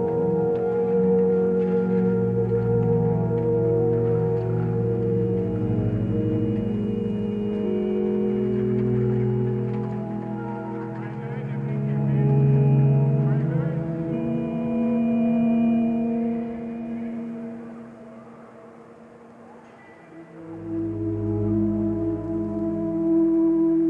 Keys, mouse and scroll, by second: 15.3 ctrl+space, 17.2 click.